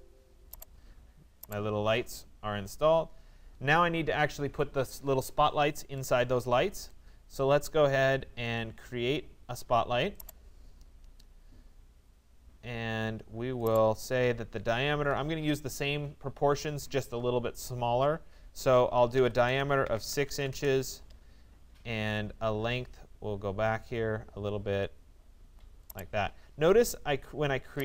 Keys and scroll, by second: 19.0 Return, 19.9 6, 20.5 Return.